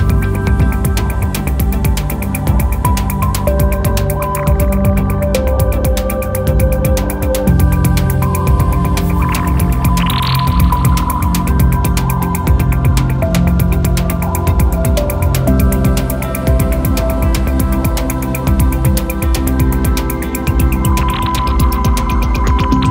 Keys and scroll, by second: 4.5 m, 6.6 space, 10.1-11.1 typing, 11.2 Tab, 20.9 super+z.